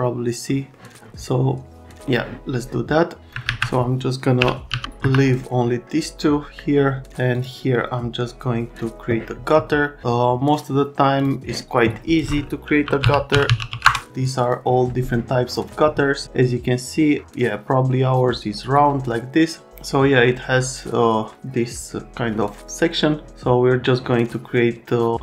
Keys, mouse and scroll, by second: 4.4 ;, 4.7 z, 5.0 F3, 12.6-14.2 typing.